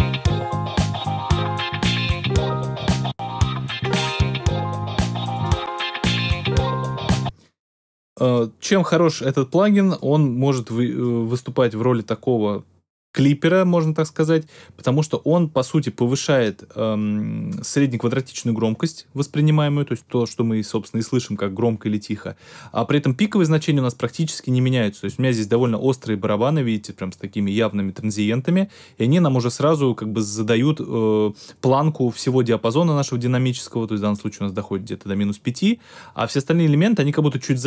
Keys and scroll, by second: 7.1 space.